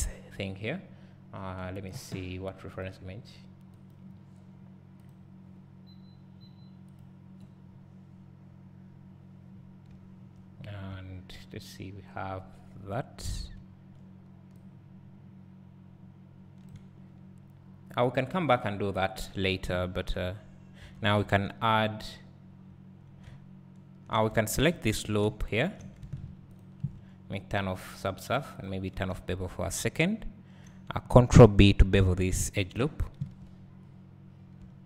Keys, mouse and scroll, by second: 5.1 click, 12.2-12.8 scroll, 14.7-20.9 drag, 19.8 scroll, 20.9 Tab, 21.3 2, 23.2 `, 24.7 alt+click, 25.2 `, 27.8-29.1 drag, 29.1 `, 33.0 ctrl+b.